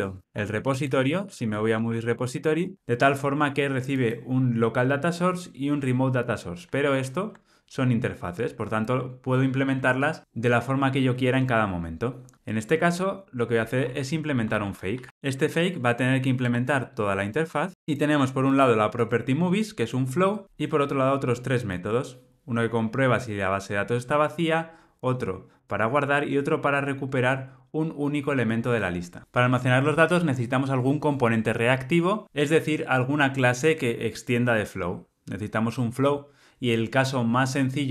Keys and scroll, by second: 7.1 super+b, 8.1 alt+super+[, 8.7 super+b, 9.8 alt+super+[, 15.5 alt+Return, 17.7 shift+Down.